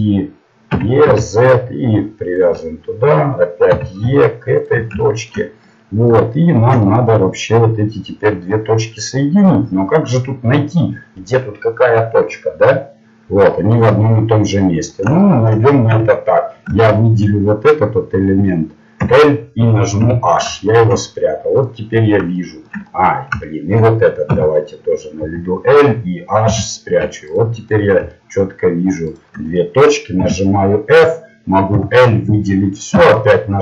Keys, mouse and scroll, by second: 0.7 e, 3.7 e, 5.0-6.1 middle drag, 6.4 middle click, 9.3-10.4 middle drag, 11.8 middle click, 14.8-19.0 middle drag, 15.9 a, 19.0 l, 20.0 h, 20.6 middle click, 21.6-23.8 middle drag, 24.3 a, 25.2 l, 26.5 h, 27.7 middle click, 30.2 f, 31.7 l, 32.9 f, 33.3-33.6 middle drag.